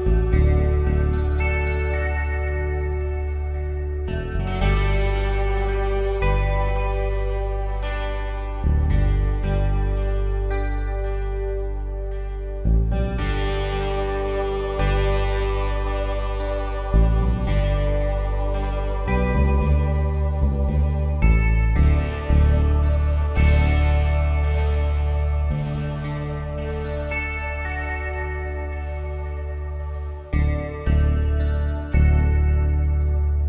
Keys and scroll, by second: 2.1 shift+F6, 5.3 ctrl+shift+i, 7.4 ctrl+Delete, 8.6 ctrl+d, 20.0 ctrl+z, 23.0 ctrl+z, 27.1 ctrl+z.